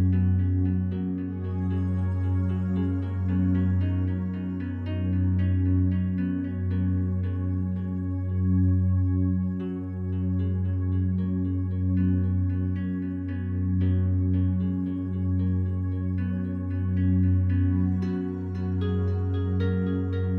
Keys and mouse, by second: 1.7-2.7 drag, 3.3 click, 5.0 click, 6.0 click, 6.7 click, 7.2 click, 7.5 click, 7.9 click, 8.9 f, 9.3 click, 9.8 click, 10.3 click, 10.7 click, 11.5-12.5 drag, 13.3 click, 14.2 click, 15.3 click, 16.0 typing, 16.4 click, 17.5 click, 18.4-19.2 typing, 19.1 click, 20.0 click.